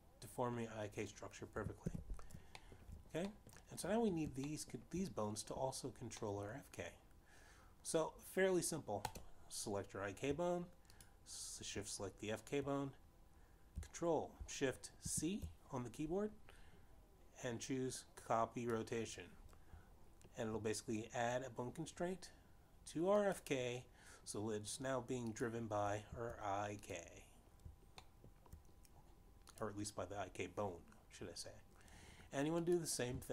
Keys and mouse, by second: 0.9 shift+middle click, 1.3 middle click, 3.7 alt+g, 4.6 shift+middle click, 5.3 middle click, 6.5 shift+middle click, 8.3 middle click, 10.7 click, 12.7 shift+click, 16.7 ctrl+shift+c, 20.0 click, 25.2 click, 27.5 click, 28.9 click, 30.2 shift+middle click, 31.6 click.